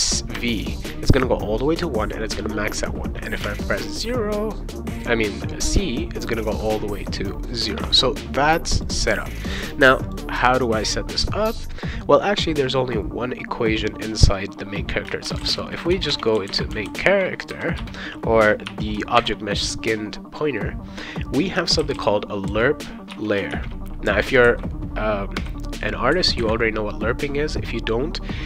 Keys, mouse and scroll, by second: 0.3 v, 3.4 c, 5.8 c, 8.8 click, 10.1 click, 15.2-17.4 typing, 17.8 Return, 18.7 -, 19.2 shift+., 21.5-23.5 typing, 23.1 Return, 25.3 ;.